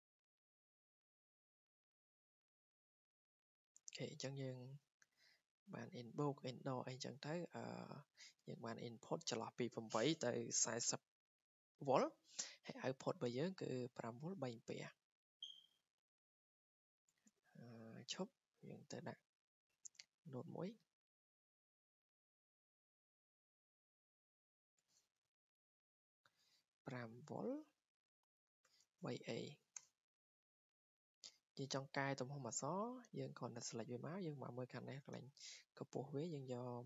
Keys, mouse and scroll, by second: 2.7-3.2 scroll, 4.2 click, 4.9 scroll down 4, 5.3 click, 5.5 scroll, 8.7 click, 11.5 click, 13.4 click, 13.6-14.1 scroll down 9, 15.5 scroll, 16.5 click, 18.3 click, 20.6 click, 22.9 click, 24.1 click, 25.0 Escape, 25.6 Escape, 25.8 click, 26.7-29.5 typing, 29.7 Return, 30.7 click, 30.8 click, 33.1 click, 35.9 click, 36.6-36.8 typing.